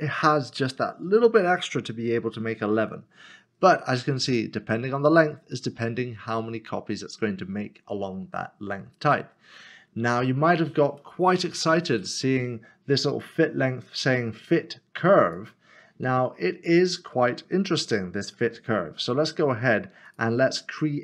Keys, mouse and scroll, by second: 4.4 click, 11.0 middle click, 13.1 click, 15.2 click, 17.7 shift+middle click.